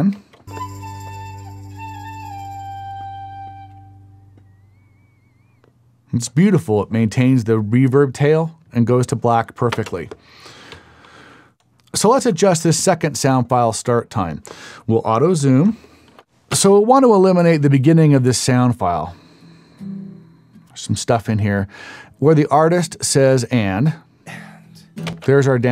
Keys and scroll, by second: 0.1 space, 9.7 space, 10.7 Up, 11.1 Up, 16.5 space, 25.1 space.